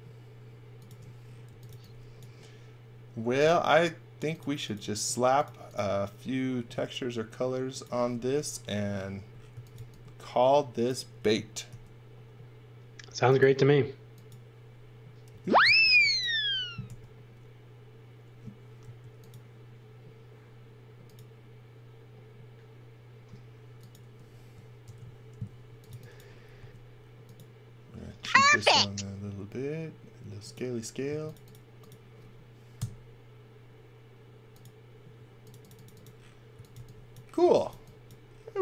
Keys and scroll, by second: 1.2-2.2 typing, 3.3 m, 9.3-10.2 typing, 11.7 r, 15.3-16.9 typing, 18.8 Left, 24.8-26.6 typing, 31.1 space, 32.7 Delete, 36.3-38.6 typing.